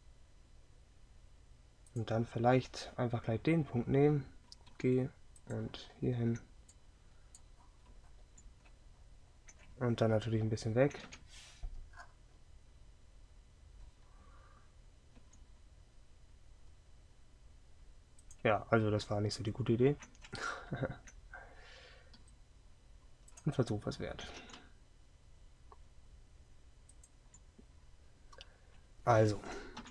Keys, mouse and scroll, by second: 5.4 g, 11.1 KP_7, 15.2 g, 22.2 r, 24.4 g.